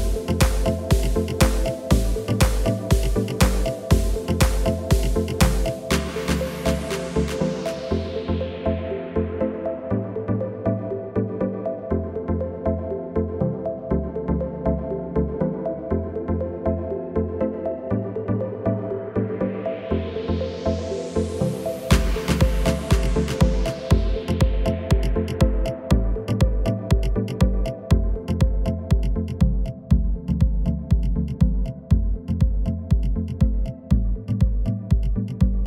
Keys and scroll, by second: 7.8 F9, 9.4 1, 13.5 typing, 17.6 ctrl+w, 23.4 F11, 26.1 1, 29.0 typing, 30.8 F11, 34.5 w, 35.3 F11.